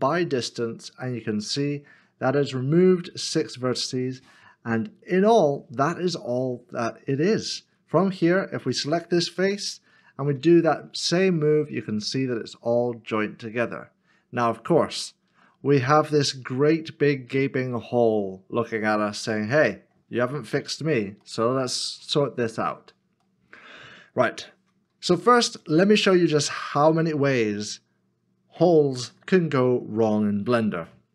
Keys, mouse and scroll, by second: 4.3 m, 4.3 middle click, 8.2 3, 10.3 g, 15.2 g, 15.3 ctrl+z, 15.8 middle click, 20.5 scroll up 1, 21.3 shift+middle click, 22.6-23.2 scroll up 1, 23.2 scroll up 1, 23.4 middle click.